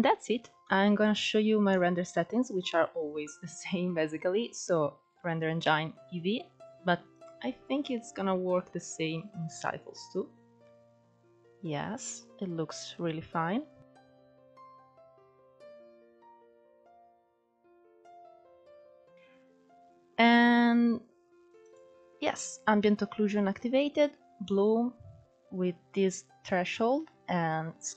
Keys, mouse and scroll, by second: 0.0 shift+middle click, 0.3-7.9 scroll up 2, 7.9-8.9 drag, 10.8-11.4 scroll down 5, 11.4-11.8 scroll up 3, 12.1 scroll up 1, 17.7-27.9 drag.